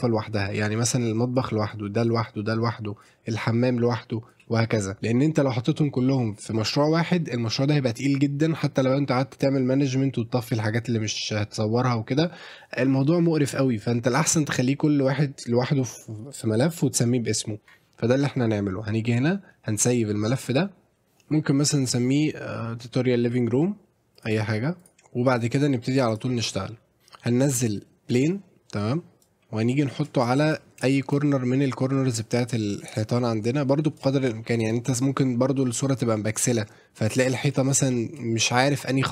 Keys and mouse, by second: 0.8 click, 19.1-20.9 drag, 26.1 click, 27.0 shift+a, 29.2-30.0 drag, 30.4 shift+middle drag, 31.0 shift+middle drag, 32.2-34.0 drag, 37.9 shift+middle click.